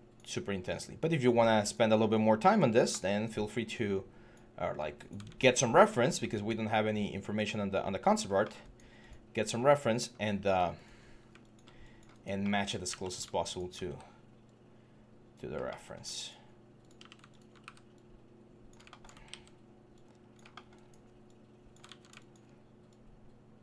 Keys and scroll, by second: 5.0 ctrl+z, 9.3 3, 10.8 3, 12.7 q, 13.7 w, 17.4 w, 19.0 ctrl+d, 21.6 ctrl+z.